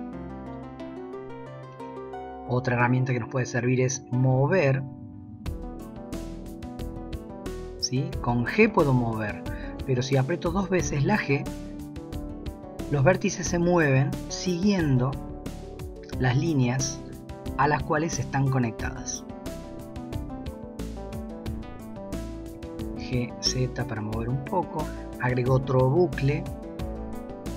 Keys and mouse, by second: 5.0 g, 8.7 g, 10.5 g, 13.5 g, 22.5 g, 24.8 ctrl+r, 26.5 s.